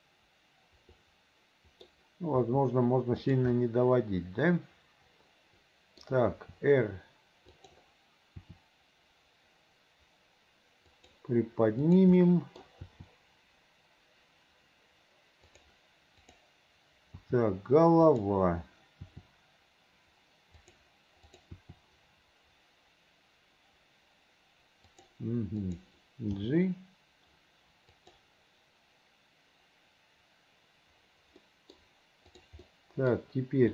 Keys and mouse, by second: 2.5 r, 3.6-6.2 middle drag, 6.5 r, 8.5 r, 12.0 click, 12.4 click, 13.0 r, 16.4 click, 17.3 r, 20.3 r, 21.4 click, 21.7 r, 25.7 click, 26.5 g, 31.5 click, 32.4 click, 32.8 click.